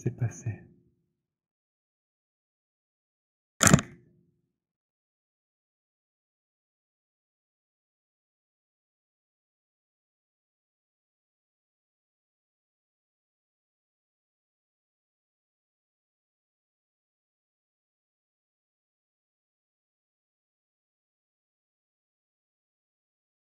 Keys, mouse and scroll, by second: 2.8 click, 6.5 click, 9.3 click, 11.1 click, 13.0 click, 14.5 click, 15.3 alt+middle click, 17.3 alt+right click, 17.3-18.1 alt+scroll, 18.5 alt+click, 19.2 alt+right click, 22.5 click.